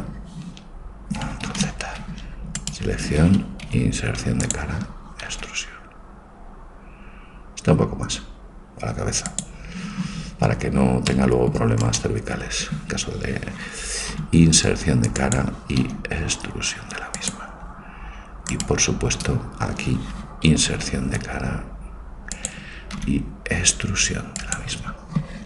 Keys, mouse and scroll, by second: 1.6 ctrl+z, 2.7-4.5 right drag, 3.7 i, 5.5 e, 11.1 middle click, 11.9 right click, 14.2 i, 15.9 e, 18.5-20.0 right drag, 20.7 i, 23.1 e.